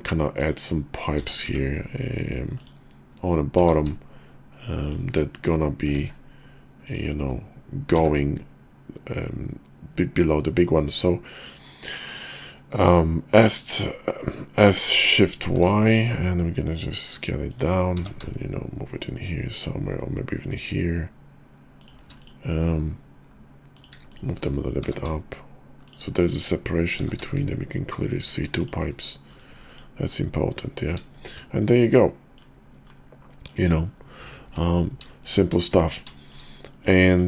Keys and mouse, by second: 1.2 s, 3.5 g, 6.0 shift+d, 7.8 s, 17.9 g, 23.7 click, 24.1 shift+click, 24.8 g, 26.9 g, 28.6 click, 29.7 click, 31.1 shift+click, 31.7 middle click, 33.3 middle click, 35.1 shift+drag, 35.5-35.9 middle drag, 36.2 shift+middle drag, 36.8 middle click, 37.1 click.